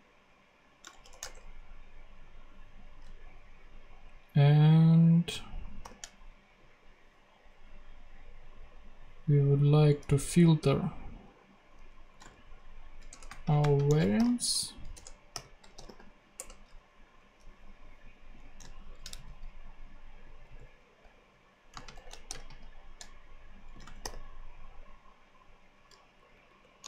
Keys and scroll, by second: 1.0 shift+[, 1.2 shift+Return, 5.8 shift+9, 11.8-16.3 typing, 13.0 Return, 14.9 Return, 18.8 alt+shift+Left, 19.1 alt+shift+super+c, 20.0 shift+super+c, 20.4 super+v, 21.7 space, 21.9 =, 22.2 shift+., 22.3 shift+space, 23.4-24.5 typing, 26.1-26.8 typing.